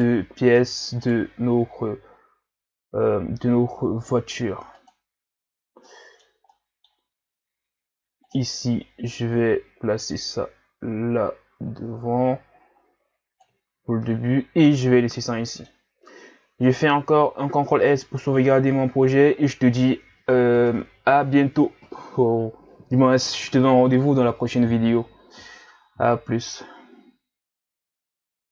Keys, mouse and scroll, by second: 1.1 shift+right click, 2.6 s, 5.2-5.6 scroll down 4, 5.9-8.2 middle drag, 8.2-13.1 drag, 13.7 a, 14.0-16.9 middle drag, 16.9 ctrl+s.